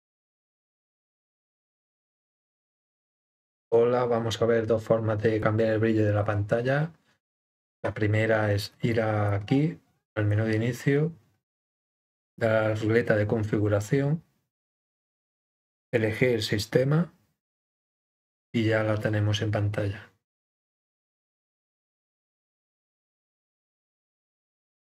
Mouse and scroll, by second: 1.9 click, 9.3 click, 12.4-13.8 drag, 15.7 click, 19.0-21.2 drag, 23.3 click.